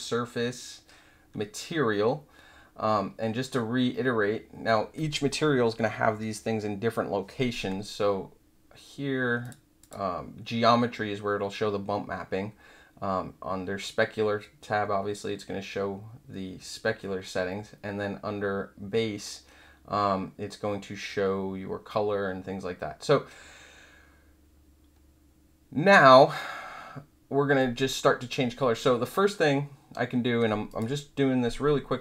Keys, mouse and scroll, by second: 9.4 click, 9.8 click, 30.6 click.